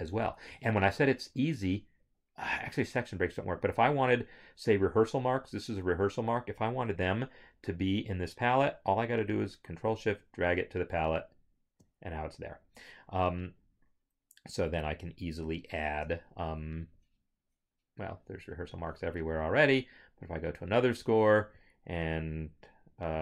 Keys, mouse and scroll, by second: 9.8 ctrl+shift+click, 16.1 scroll, 18.8 scroll, 20.6 click.